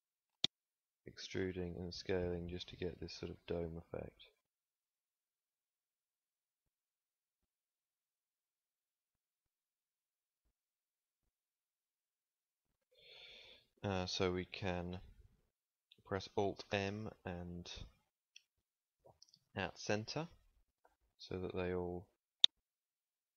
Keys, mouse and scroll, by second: 3.5 s, 4.9 e, 9.2 s, 9.7 g, 16.6 alt+m, 20.8 z.